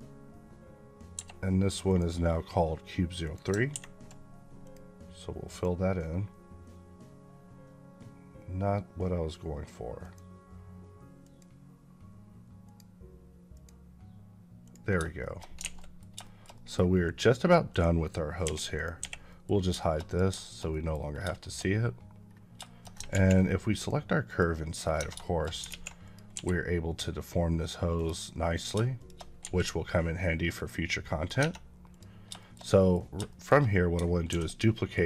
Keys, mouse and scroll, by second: 1.0 Escape, 1.7 click, 3.1 click, 4.5 click, 9.9 click, 15.1 shift+middle click, 15.5 alt+a, 15.7 middle click, 16.1 shift+middle click, 16.9 click, 18.3 h, 18.6 click, 18.9 h, 19.1 middle click, 20.0 click, 20.3 shift+middle click, 21.3 shift+middle click, 21.6-22.0 scroll up 2, 22.0 scroll down 1, 22.5 shift+middle click, 23.6 click, 24.7 scroll down 2, 24.8 Tab, 25.1 shift+middle click, 25.5 alt+z, 25.9 click, 26.2 g, 27.8 right click, 28.4 click, 28.8 shift+click, 29.3 g, 30.4 right click, 30.9 middle click, 31.2 Tab, 31.7 click, 32.2 shift+middle click, 33.1 shift+middle click, 34.8 right click.